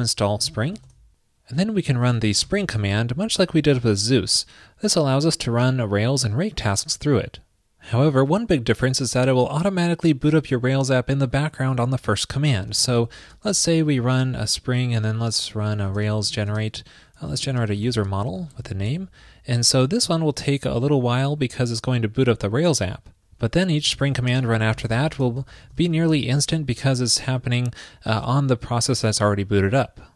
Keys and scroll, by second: 11.6 super+k.